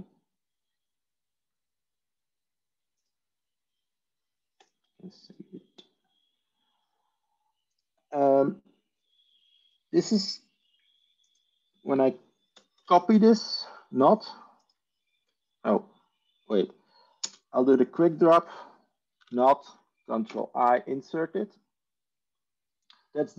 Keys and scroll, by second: 12.7 ctrl+c, 18.1 ctrl+space, 18.7-19.7 typing, 20.1 ctrl+i.